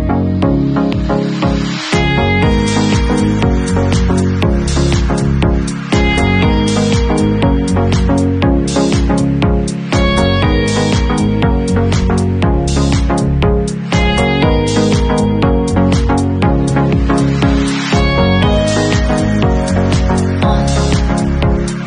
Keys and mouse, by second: 0.5-11.7 drag, 11.7-21.8 middle drag.